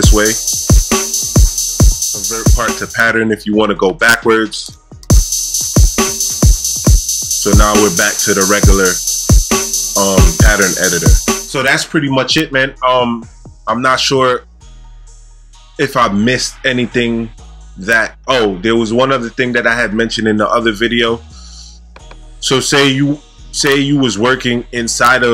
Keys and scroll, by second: 0.0 space, 5.0 space, 11.3 space.